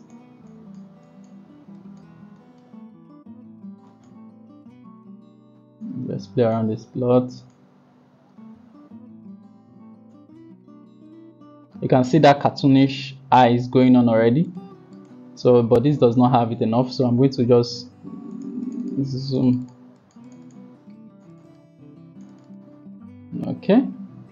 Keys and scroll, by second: 17.1-17.9 typing.